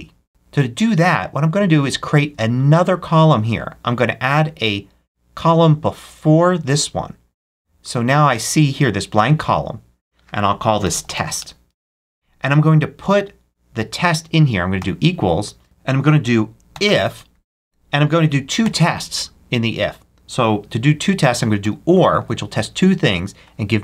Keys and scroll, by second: 10.5-11.5 typing, 14.7 =, 16.6 shift+i, 17.7 shift+f, 18.5 shift+9, 21.0-22.0 typing.